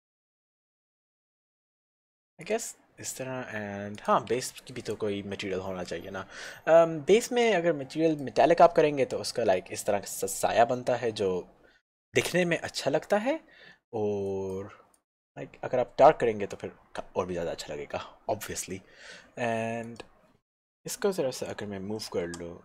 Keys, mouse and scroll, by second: 0.6 w, 2.1 click, 7.7 click, 12.9 click, 19.9 click, 22.3 g.